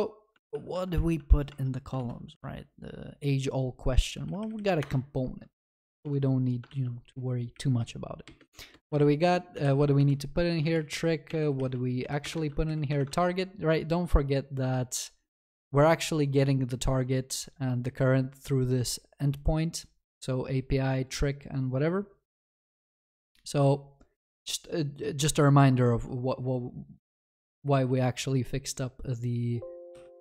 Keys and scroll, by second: 4.8 Tab, 4.9 Return, 6.7 ctrl+s, 10.0 Return, 12.3 Return, 12.4 ctrl+s.